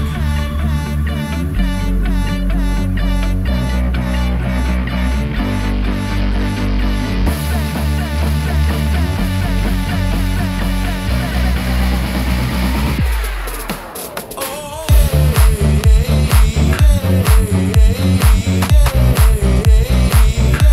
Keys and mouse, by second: 0.5 click, 2.0 3, 2.2 click, 2.8 1, 3.8 m, 6.2 click, 6.9 click, 7.2 middle click, 8.0 shift+middle click, 8.2 shift+click, 8.3 right click, 9.3 shift+click, 9.8 ctrl+middle click, 10.6 click, 10.6 right click, 12.1 alt+s, 14.4 middle click, 14.7 Tab, 15.0-17.8 middle drag, 18.4 2, 18.9 alt+click, 19.7-20.7 drag.